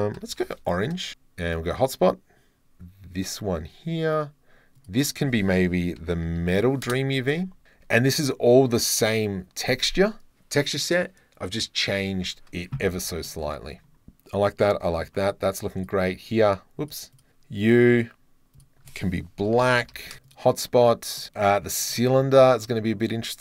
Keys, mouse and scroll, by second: 1.5 click, 3.2 click, 4.8-6.3 drag, 6.7 middle click, 9.2 click, 13.3 click, 13.7 middle click, 13.9 middle click, 14.6 click, 15.9 click, 16.8 click, 17.2 click, 17.7 drag, 17.8 middle click, 20.3 middle click, 21.2 middle click, 21.5 click, 22.7 middle click.